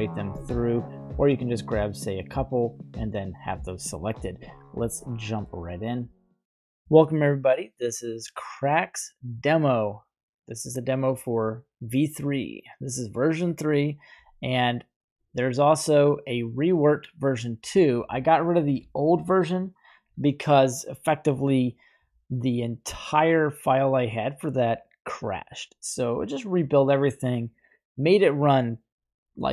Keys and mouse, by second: 2.8 y, 4.8-5.5 middle drag, 17.8-21.1 drag.